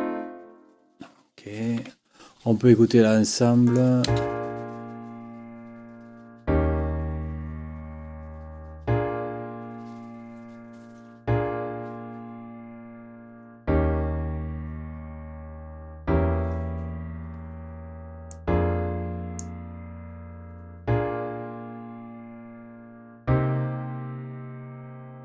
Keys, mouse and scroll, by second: 1.8 Escape, 3.6 click, 4.0 space, 18.3-19.6 drag.